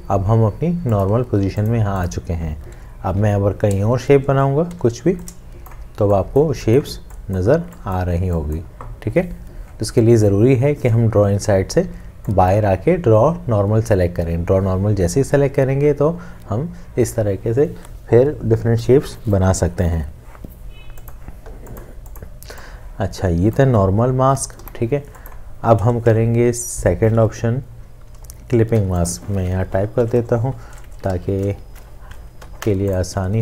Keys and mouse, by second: 3.1 m, 24.6 Delete, 31.2 ctrl+z, 32.5 Escape.